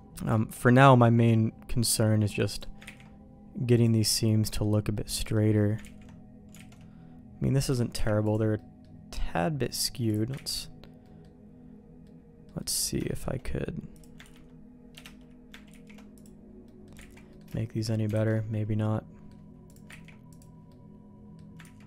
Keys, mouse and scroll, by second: 0.3 shift+middle click, 0.8 middle click, 1.6 middle click, 2.5 click, 2.8 ctrl+e, 4.2 middle click, 4.9 click, 5.2 middle click, 5.8 ctrl+z, 6.5 alt+a, 7.6 a, 7.9 u, 8.5 middle click, 8.6 click, 9.0 middle click, 10.0 middle click, 10.5 ctrl+x, 11.0 middle click, 12.0 middle click, 12.5 middle click, 13.0 shift+middle click, 13.9 click, 14.2 ctrl+r, 15.6 ctrl+e, 16.6 middle click, 17.0 ctrl+z, 17.2 middle click, 17.5 shift+middle click, 18.1 alt+a, 18.3 middle click, 19.6 click, 20.0 ctrl+e, 20.6 middle click, 21.6 ctrl+z.